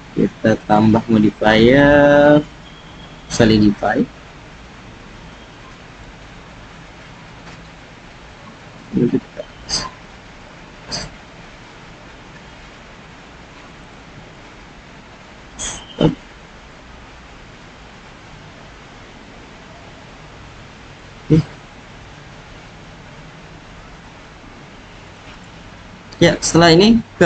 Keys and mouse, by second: 0.5-3.3 drag, 5.2 click, 8.8-10.4 drag, 11.6-13.2 drag, 13.8-14.4 drag, 15.2 s, 15.9 click, 16.4 click, 16.6-18.0 drag, 19.2 g, 19.7 z, 20.9-21.3 drag, 22.8 g, 24.0 s, 25.0-25.4 drag, 26.4-27.2 drag.